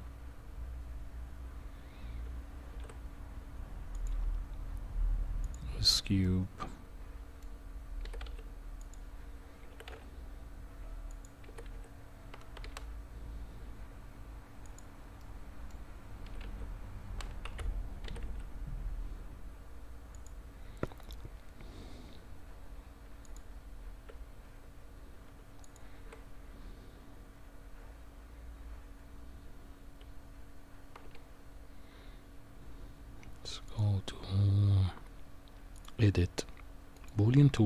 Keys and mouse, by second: 2.7 shift+a, 6.2-7.4 middle drag, 8.0 g, 9.7 s, 11.4 g, 15.2-15.9 middle drag, 16.4 z, 18.0 g, 23.0 Tab, 25.6 shift+click, 31.0 n, 33.6 click, 36.9 click.